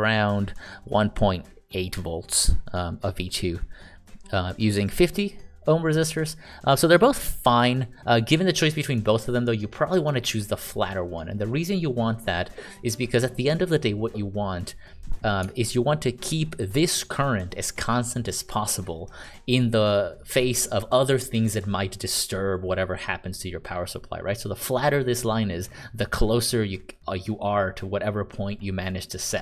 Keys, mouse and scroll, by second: 16.3 ctrl+d, 16.8-18.4 ctrl+d, 18.4-19.2 d.